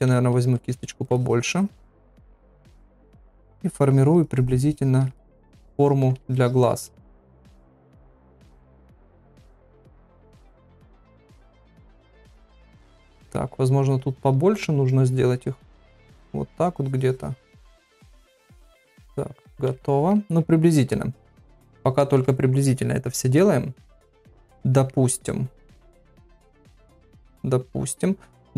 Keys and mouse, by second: 0.1-0.5 ], 1.1 ctrl+], 1.2 ctrl+click, 1.8 ctrl+click, 2.8 ctrl+click, 3.6 ctrl+click, 3.8 ctrl+click, 4.2 ctrl+click, 4.9 ctrl+click, 5.1 middle click, 5.8 ctrl+click, 6.3 shift+click, 6.7 shift+click, 7.6 shift+click, 8.2 ctrl+click, 9.3 ctrl+click, 9.8 ctrl+click, 10.5 ctrl+middle click, 10.8 middle click, 11.5 ctrl+click, 12.6 ctrl+click, 13.1 middle click, 13.7 ctrl+click, 15.3-16.4 ctrl+drag, 16.6 ctrl+click, 17.3 ctrl+click, 18.0 shift+click, 18.5 shift+click, 19.3-19.8 [, 19.8 middle click, 20.9 middle click, 21.6 middle click, 22.0 ctrl+middle click, 22.3 middle click, 23.4-24.9 middle drag, 26.4 KP_3.